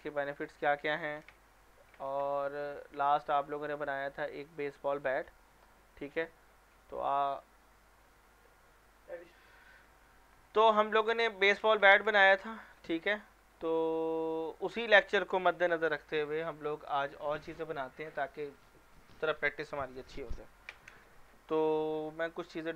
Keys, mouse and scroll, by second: 0.1 click, 1.2 Delete, 9.2 click, 11.1-11.8 middle click, 11.3 scroll down 1, 11.8 scroll up 1, 12.2 middle click, 13.4 scroll up 1.